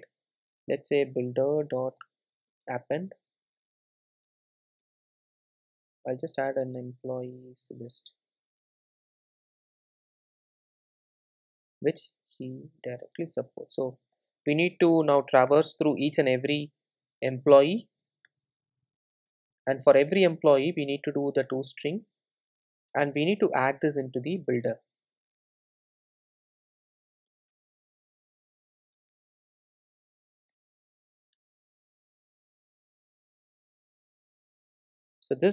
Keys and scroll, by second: 2.0 Return, 13.7 super+v, 15.9 Return, 27.3 Return.